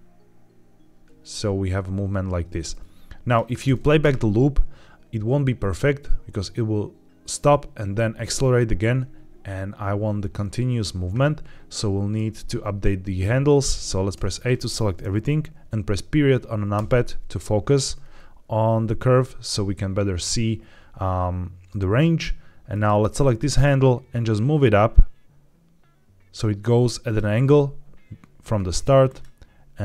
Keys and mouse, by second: 3.5 space, 14.0 a, 16.6 KP_Decimal, 22.6 click, 23.2 click, 23.4-26.0 drag, 28.9 click.